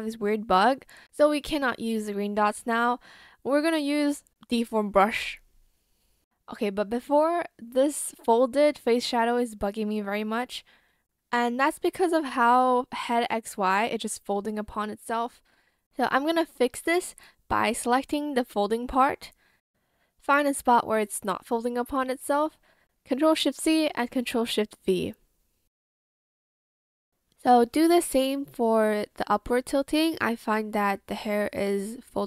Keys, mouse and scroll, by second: 11.9 ctrl+z, 12.6 ctrl+z, 13.0 ctrl+z, 20.2 ctrl+z, 22.9 ctrl+shift+c, 23.9 ctrl+shift+v.